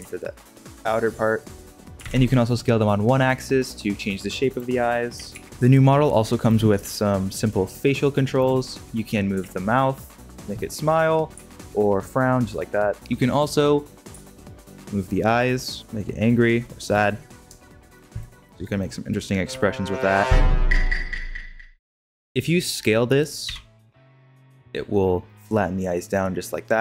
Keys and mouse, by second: 1.9 s, 5.1 s, 6.4 click, 6.8-7.1 middle drag, 7.4 middle click, 9.3 g, 10.6-11.3 middle drag, 11.3 g, 12.9 alt+g, 14.0 g, 18.2-19.4 middle drag, 19.4 g, 22.1 alt+g, 23.4 s.